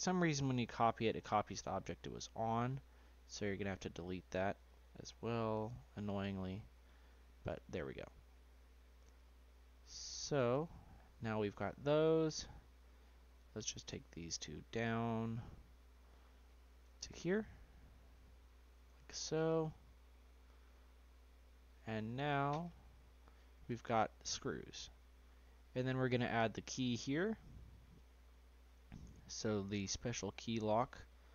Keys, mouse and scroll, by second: 0.7 Delete, 1.2-2.0 scroll down 4, 2.0-2.6 middle drag, 2.6-2.9 scroll down 4, 2.9 middle click, 3.2 scroll up 1, 3.6 click, 4.5 click, 5.6 Delete, 6.1 middle click, 6.3-6.7 scroll up 3, 6.7-7.2 middle drag, 7.2 scroll up 1, 7.4-8.2 scroll down 2, 8.2 scroll up 1, 9.1 shift+click, 10.1 shift+click, 11.4 click, 12.5 click, 13.4 click, 14.2 shift+click, 14.6 scroll down 3, 15.9 click, 17.6 click, 18.1 scroll up 3, 18.3-19.2 shift+middle drag, 19.2-19.7 scroll up 1, 19.7 scroll down 1, 20.0-21.8 middle drag, 21.8-23.3 scroll down 2, 23.3-23.8 middle drag, 23.8 scroll up 1, 24.0-25.0 scroll down 3, 25.0-25.4 scroll up 1, 25.4-26.1 shift+middle drag, 26.1-26.5 scroll up 2, 26.5-30.1 shift+middle drag, 30.1 click, 30.7-31.1 scroll up 4, 31.1-31.3 shift+middle drag.